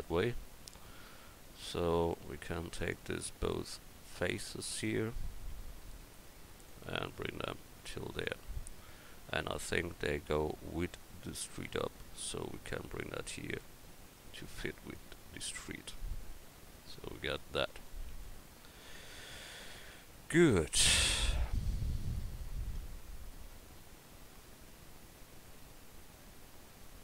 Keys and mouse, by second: 2.8-5.1 drag, 4.0-5.1 right drag, 5.2-8.1 right drag, 6.7-8.1 drag, 8.8 click, 15.3 Tab.